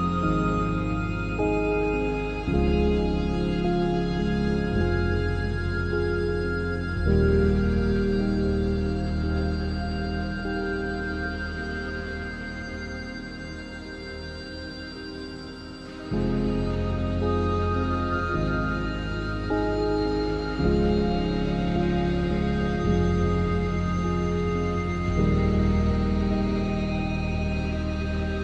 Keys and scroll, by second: 2.0 ctrl+s, 3.9 shift+d, 5.9 1, 6.3 3, 8.5 1, 8.8 3, 9.4 Tab, 10.7 Tab, 12.2 Tab, 15.3 Tab, 15.6 s, 17.0 shift+s, 18.4 ctrl+z, 19.4 ctrl+s, 23.5 Tab, 23.9 1, 24.4 3, 25.0 s, 25.2 z, 28.2 0.